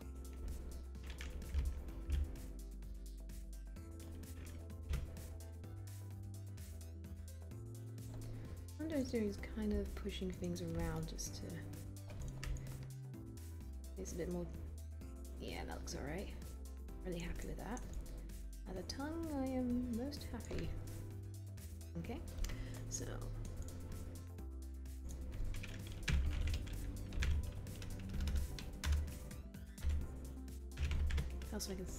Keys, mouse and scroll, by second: 2.4 r, 5.1 w.